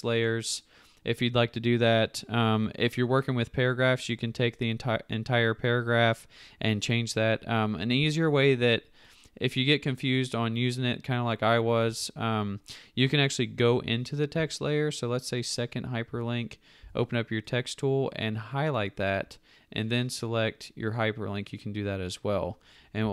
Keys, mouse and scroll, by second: 16.8 t.